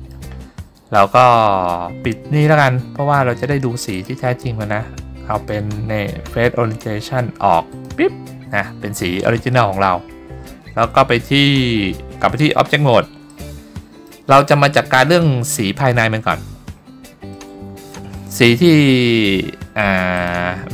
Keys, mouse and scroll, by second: 4.0-8.4 drag, 12.4 Tab, 13.4-14.2 middle drag, 17.4-18.0 shift+middle drag.